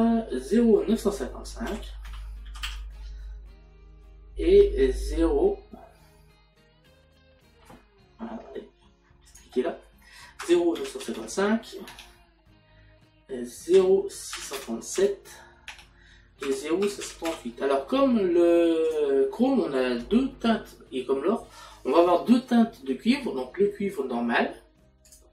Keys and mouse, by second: 9.3 click, 12.3 Tab, 16.4 Tab, 18.9 click.